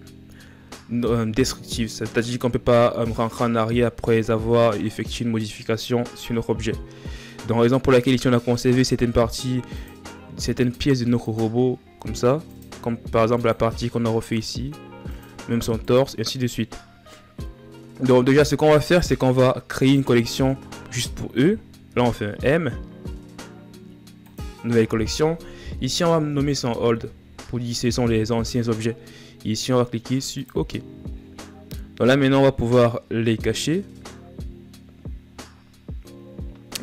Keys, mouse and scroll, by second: 9.5-18.6 drag, 18.6-21.6 drag, 21.6 m.